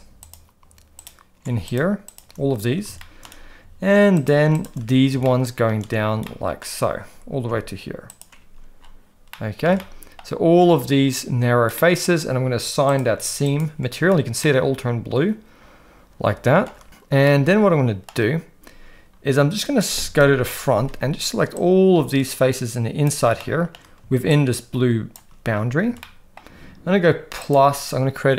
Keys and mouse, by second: 0.2 alt+shift+click, 1.0 alt+shift+click, 1.6 shift+click, 2.1 shift+click, 3.0 shift+middle click, 4.2 shift+click, 5.2 shift+middle click, 6.3 shift+middle click, 9.3 middle click, 9.9 shift+middle click, 11.9 middle click, 13.4 click, 14.4-16.7 middle drag, 17.3 middle click, 20.3 KP_1, 21.5-23.0 drag, 23.4 shift+middle click, 24.3 shift+click, 26.0 shift+middle click, 27.4 click.